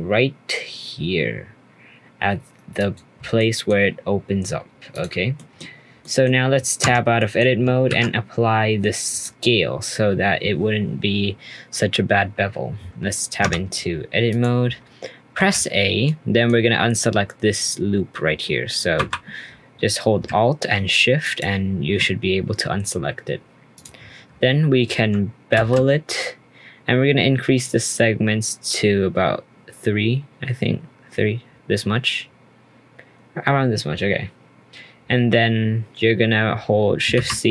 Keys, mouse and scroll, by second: 3.3-4.9 middle drag, 4.9 click, 5.3 middle click, 5.9 scroll down 1, 6.0 middle click, 6.5-6.8 scroll down 1, 6.8 Tab, 7.2 middle click, 7.4 scroll down 1, 7.8 ctrl+a, 13.4 Tab, 14.3 click, 14.8-15.3 scroll up 1, 15.3 a, 16.0-18.9 middle drag, 18.9 2, 21.2 alt+shift+click, 23.7 click, 25.5 ctrl+b.